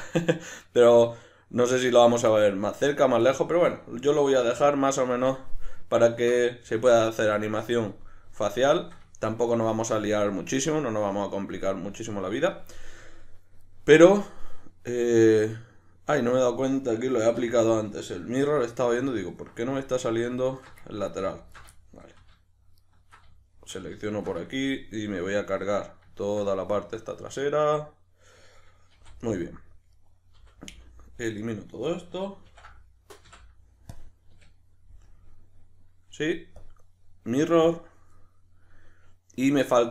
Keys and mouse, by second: 4.4 \, 5.1 Tab, 6.8 KP_Decimal, 13.0-13.8 drag, 13.8-19.0 middle drag, 17.4 2, 19.0 alt+right click, 19.7-20.5 shift+middle drag, 20.5 alt+shift+right click, 20.8-21.3 ctrl+middle drag, 21.3 alt+shift+right click, 21.7-22.7 shift+middle drag, 22.7 alt+shift+right click, 23.3-24.0 shift+middle drag, 24.0 alt+shift+right drag, 24.4-29.3 shift+middle drag, 28.9 v, 29.3 right click, 30.0 right click, 30.4 l, 35.1 KP_Decimal, 36.6-39.9 drag.